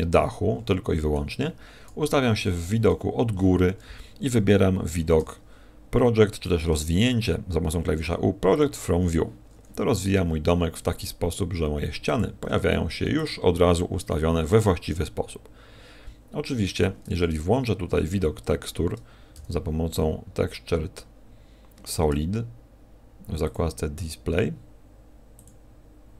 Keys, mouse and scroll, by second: 2.0 KP_1, 2.6 KP_7, 5.1 u, 10.7 s, 12.4 click, 12.4 g, 19.3 n, 20.2-20.8 scroll down 5, 21.0-21.5 scroll down 8, 22.0 Tab, 23.4 click, 25.6 click.